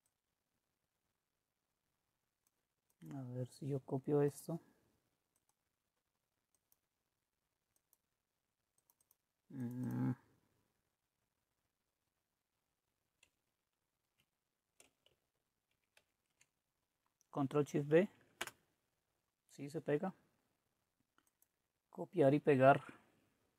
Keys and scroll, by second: 16.0 ctrl+v, 17.7 Right, 18.4 Return.